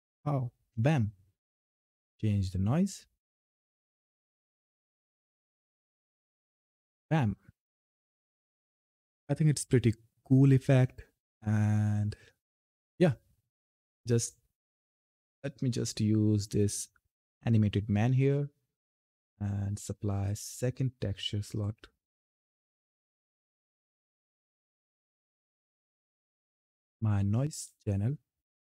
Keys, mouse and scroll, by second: 2.2 click, 3.2 right click, 4.0 click, 4.9 ctrl+F10, 5.7 f, 13.5-14.0 scroll up 1, 14.0-14.6 scroll down 1, 14.6 scroll up 1, 17.1-28.1 drag.